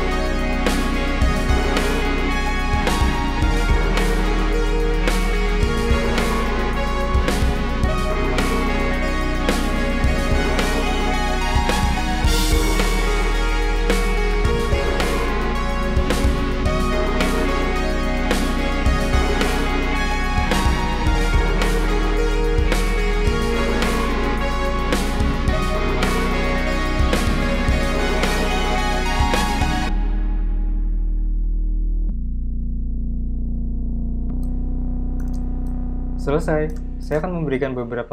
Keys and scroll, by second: 4.6 super+z, 7.0-8.4 typing, 9.0 super+z, 9.5 p, 12.1-16.8 typing, 12.2 Return, 12.6 shift+super+}, 18.4-19.3 typing, 20.9 p, 21.7 super+z, 21.9 v, 22.3 p, 23.1 v, 29.1-31.2 typing.